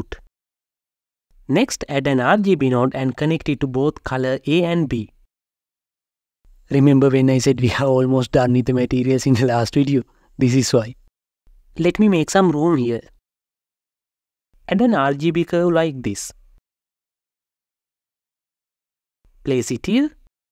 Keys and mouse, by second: 0.8 shift+a, 5.5 click, 7.0-8.6 drag, 9.8-11.3 drag, 12.5-13.4 drag, 14.4 shift+a, 19.6 click.